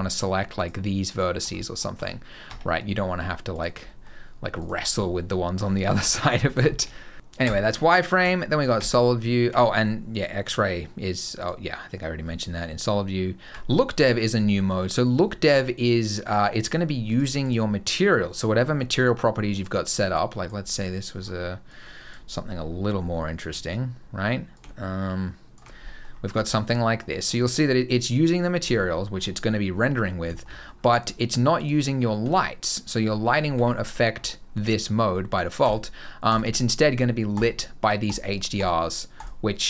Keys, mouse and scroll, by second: 0.4 shift+click, 0.9 shift+click, 1.4 middle click, 1.8 Tab, 2.3 Tab, 3.4 click, 3.7 middle click, 4.4 click, 4.8 middle click, 5.6 scroll down 2, 5.9 middle click, 6.1 Tab, 6.2 scroll down 3, 6.5 shift+middle click, 7.3 z, 8.6 z, 10.0 click, 11.2 click, 12.1 z, 14.0 middle click, 14.4 middle click, 16.1 click, 16.9 click, 17.3 click, 18.2-18.6 scroll down 9, 19.4 click, 21.0-21.5 scroll down 3, 21.5 click, 22.5-24.0 scroll up 4, 24.4 click, 25.7 middle click, 25.9 scroll down 3, 26.3 shift+middle click, 26.5 middle click, 27.0 middle click, 28.4-29.4 scroll up 11, 29.4 middle click, 29.8 scroll down 2, 30.2 shift+middle click, 30.4 middle click, 30.6-30.9 scroll down 5, 31.4 click, 32.0 g, 33.7-34.3 scroll up 6, 35.5 click.